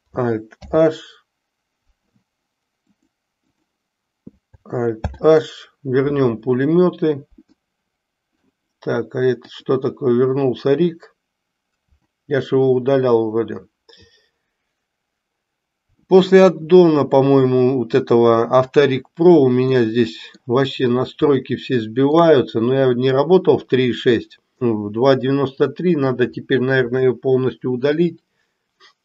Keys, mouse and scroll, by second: 0.5 alt+h, 2.9-3.8 drag, 5.0 alt+h, 7.5 middle click, 9.5 click, 11.9 Delete, 19.8 middle click, 21.4-22.2 shift+middle drag.